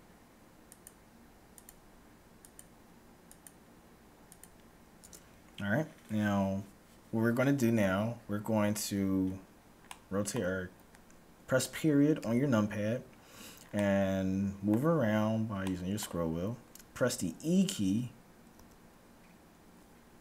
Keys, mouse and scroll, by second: 9.9-11.5 middle drag, 11.5-12.2 scroll down 1, 12.2 KP_Decimal, 13.2-13.9 scroll down 1, 13.9-17.4 middle drag, 18.5 e.